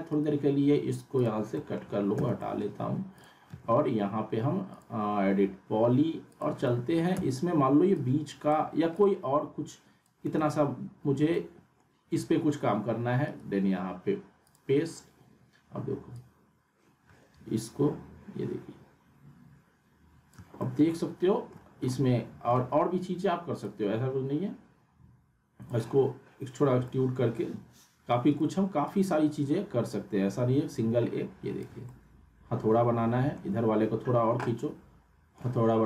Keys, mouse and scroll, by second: 0.1 right click, 1.3 click, 1.5 middle click, 2.1 z, 2.4 alt+middle click, 3.1 click, 3.6 e, 4.7 click, 6.7 alt+w, 7.1 z, 7.9-8.5 drag, 10.4 alt+w, 11.3-11.9 alt+middle drag, 13.2 right click, 14.5-20.5 drag, 20.6-21.5 alt+middle click, 21.9-22.5 alt+middle drag, 23.9-25.8 drag, 26.6 scroll down 2, 26.9 alt+middle click, 28.3 right click, 29.2-31.6 drag, 31.8-33.4 alt+middle drag, 34.8-35.5 alt+middle drag.